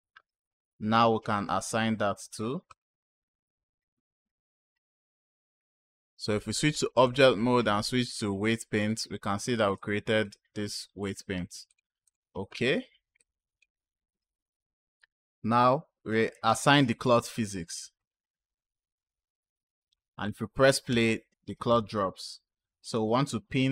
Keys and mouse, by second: 2.5 click, 4.8-6.2 drag, 6.9-8.5 drag, 9.6 click, 11.5-12.0 drag, 13.0 click, 16.9 click, 17.8 click, 20.9 space, 21.5 space, 22.5 click.